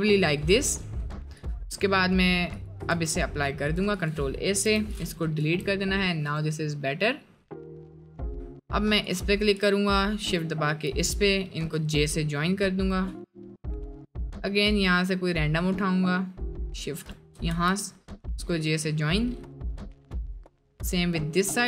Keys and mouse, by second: 2.9 ctrl+a, 4.7 Delete, 5.2 middle click, 5.4 Tab, 7.4 click, 11.7 j, 13.3 middle click, 15.5 middle click, 17.5 j, 19.4 middle click, 20.3 middle click.